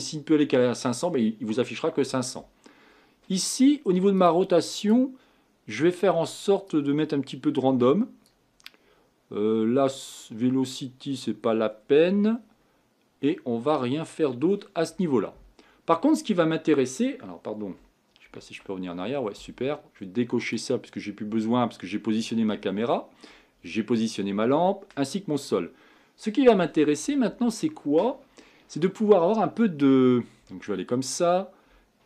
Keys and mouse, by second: 4.2-15.8 drag, 18.3 ctrl+z, 21.5 click, 30.6 click, 31.4 click.